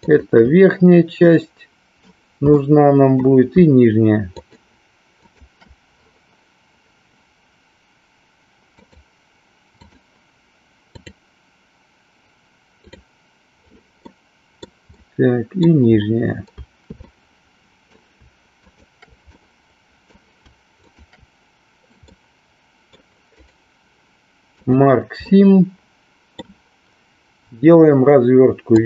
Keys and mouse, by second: 1.3 middle click, 2.7 middle click, 4.3 shift+click, 5.3 shift+click, 8.8 click, 10.9 click, 14.0 middle click, 15.0 middle click, 17.0 middle click, 18.7 shift+click, 19.4 middle click, 20.9 shift+click, 22.0-23.0 middle drag, 23.4-24.8 right drag, 25.4-26.5 middle drag.